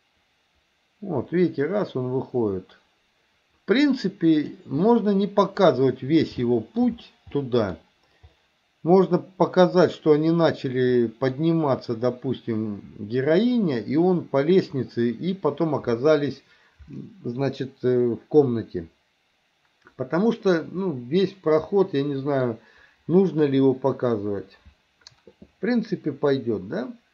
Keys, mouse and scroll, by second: 4.9-6.2 middle drag, 6.5 shift+middle click, 7.4-7.7 middle drag, 11.1 middle click, 21.0-22.5 middle drag.